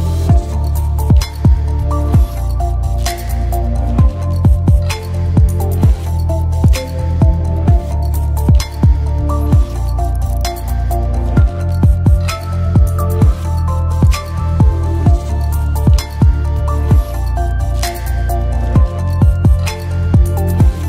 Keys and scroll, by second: 0.4-1.7 typing, 5.1-6.4 typing, 20.2 d.